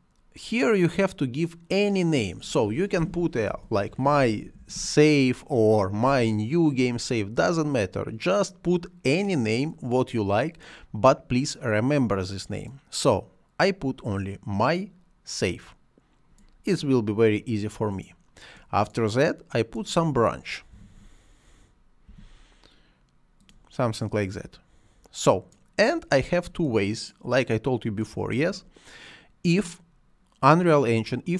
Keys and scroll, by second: 3.2-5.1 typing, 20.6 i, 22.0 f.